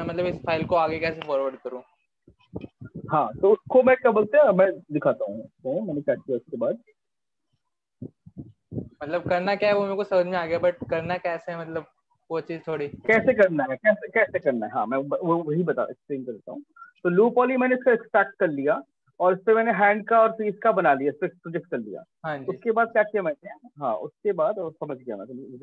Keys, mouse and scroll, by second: 10.9 click, 11.6 alt+click, 12.5 right click, 13.3 alt+click, 21.7 click, 23.3 click, 24.6 m.